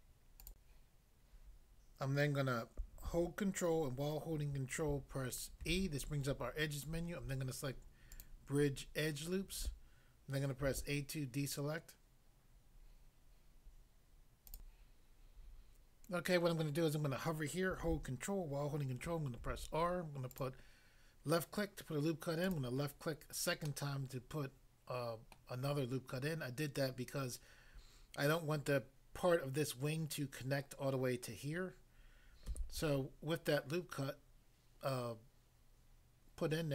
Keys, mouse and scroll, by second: 0.5 click, 0.6 click, 5.7 ctrl+e, 8.1 click, 8.2 click, 10.7 a, 14.5 click, 14.7 click, 19.4 ctrl+r, 20.3 click, 22.5 click, 23.6 middle click, 25.3 middle click, 32.5 a.